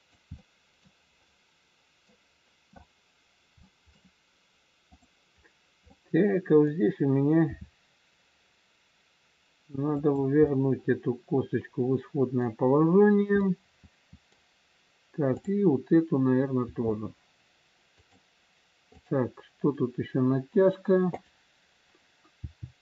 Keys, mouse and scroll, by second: 0.3 middle click, 2.1 middle click, 3.3 scroll up 1, 3.6 middle click, 4.8 click, 6.0 middle click, 7.4 r, 10.4 middle click, 12.7-13.3 scroll down 1, 13.3 middle click, 15.4 click, 16.6 r, 18.9 click, 22.3 click, 22.3 g.